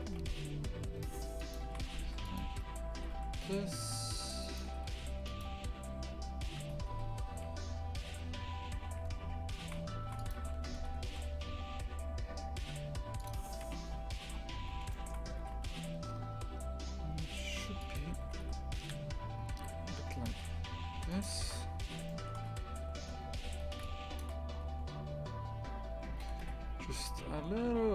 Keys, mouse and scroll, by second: 0.1 g, 1.7 shift+f, 3.0 g, 4.7 g, 6.6 Tab, 6.9 a, 7.5 s, 9.6 shift+f, 10.4 s, 13.7 KP_3, 14.3 scroll down 1, 14.9 shift+middle click, 15.5 g, 18.3 g, 21.5 scroll up 2, 22.1-23.1 shift+middle drag, 23.1 z, 23.3 1, 23.6 a, 24.2 shift+click, 26.3 g.